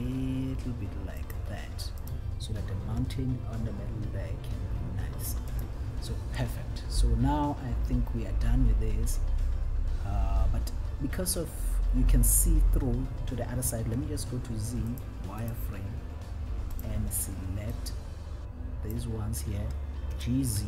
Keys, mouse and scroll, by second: 1.6 click, 2.3 click, 3.3 g, 5.9 click, 11.9-13.4 scroll up 1, 14.1 z, 15.8 click, 17.0 click, 18.1-19.2 drag, 20.5 g.